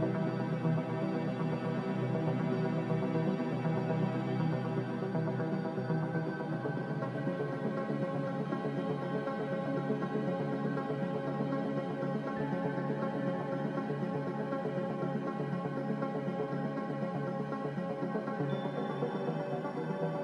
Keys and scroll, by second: 5.0 5, 5.3 Return, 13.2 ctrl+z, 13.7 ctrl+z.